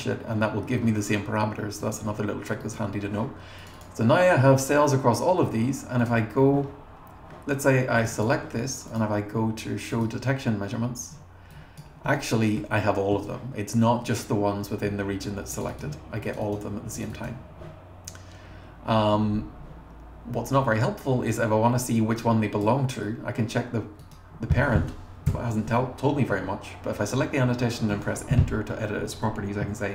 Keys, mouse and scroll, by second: 2.6 click, 3.6 click, 3.8 click, 6.0 click, 8.0 click, 8.1 click, 8.9 click, 9.9 click, 12.1-12.6 scroll up 4, 13.1 scroll up 2, 15.5 click, 15.7 click, 16.2 click, 16.5 click, 17.0 click, 17.1 click, 18.1 scroll up 1, 18.4 scroll down 1, 19.3 scroll down 1, 22.0 click, 24.1 click, 25.3 Return, 29.8-29.9 typing.